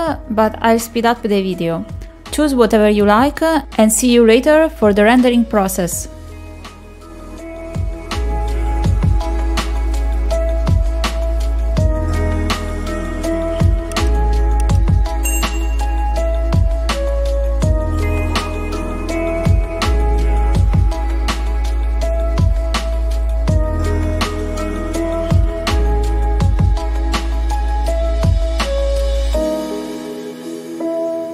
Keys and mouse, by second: 0.2 click, 1.5 click, 2.0 click, 2.4 click, 3.0 click, 3.2 click, 3.5 middle click, 3.9 click, 6.9 middle click, 7.2 shift+middle click, 8.4 r, 8.8 click, 12.8 click, 13.2 r, 14.5 click, 14.7 click, 14.8 click, 16.2 middle click, 16.3 middle click, 16.5 shift+middle click, 17.5 shift+middle click, 18.2 middle click, 18.5 click, 18.8 r, 19.3 click, 20.4 middle click, 20.6 shift+middle click, 22.2 click, 22.5 middle click, 22.7 shift+middle click, 25.3 click, 25.6 s, 27.2 middle click, 28.0 shift+middle click, 28.4 click, 28.8 click, 28.9 click, 30.1 click, 30.4 r, 30.9 click, 31.0 middle click, 31.2 shift+middle click.